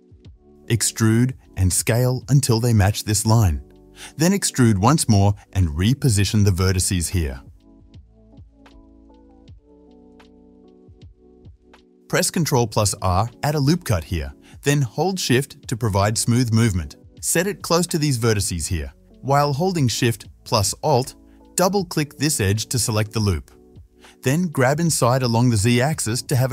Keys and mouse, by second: 0.1 e, 1.0-7.6 shift+drag, 1.9 e, 4.9 e, 7.6-11.5 middle drag, 11.6 click, 11.9-19.3 shift+middle drag, 13.7 ctrl+r, 19.3 click, 19.4 middle click, 20.3 alt+shift+click, 20.4-25.8 alt+shift+middle drag, 25.8-26.5 drag.